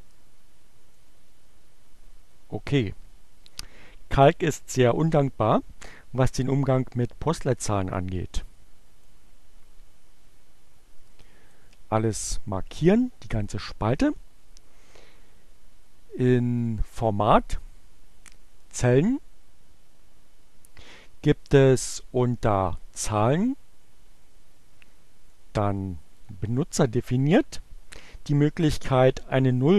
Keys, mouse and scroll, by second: 6.9-10.5 drag, 11.6 click, 15.6 click, 16.8-18.1 drag, 24.3 click, 25.1 click.